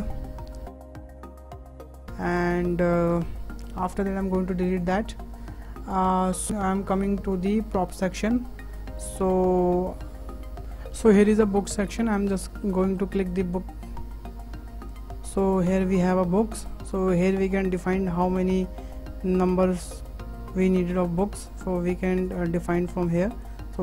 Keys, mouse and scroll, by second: 0.0 scroll down 2, 0.0 Tab, 0.2 Tab, 0.6 Tab, 0.8 scroll down 3, 1.6-2.0 scroll up 1, 2.0 click, 2.4 click, 3.2 Delete, 3.4 Delete, 4.7-6.6 shift+middle drag, 8.8-10.6 shift+middle drag, 10.6 Delete, 12.1 scroll up 3, 12.4-14.9 shift+middle drag, 14.9 click, 15.5-16.0 scroll up 4, 16.0-19.0 shift+middle drag, 21.5-22.3 drag, 23.3-23.8 drag.